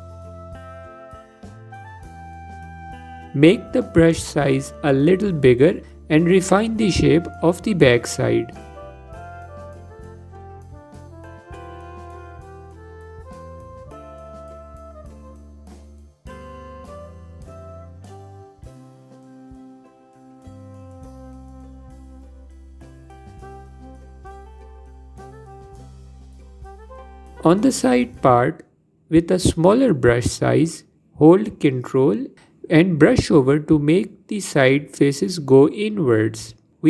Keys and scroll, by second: 4.4 f, 28.1 f.